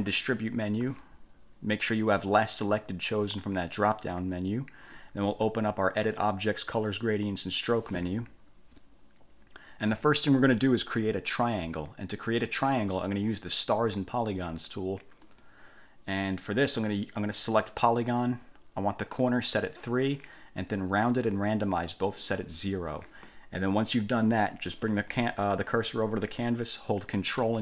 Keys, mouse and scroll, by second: 0.4 click, 2.3 click, 3.8 click, 6.9 click, 15.4 click, 18.3 click.